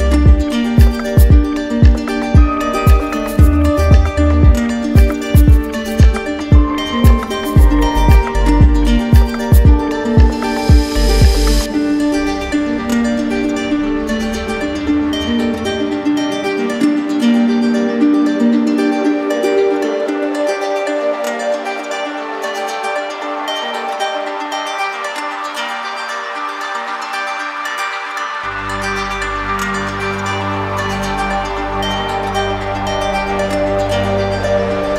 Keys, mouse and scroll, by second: 0.4 right click, 1.1 click, 1.9 click, 3.1 click, 3.6 alt+right click, 5.4 click, 6.3 click, 7.1 click, 8.3 click, 9.1 alt+right click, 11.1 right click, 12.3 click, 13.3 click, 14.2 click, 14.9 click, 16.4 click, 17.1 click, 17.8 click, 18.3 click, 18.8 click, 20.2 click, 20.8 right click, 21.6 alt+right click, 23.1 right click, 25.5 alt+right click, 26.9 right click, 29.0 click, 29.7 right click, 30.3 shift+right click, 31.6 alt+right click, 32.6 alt+right click.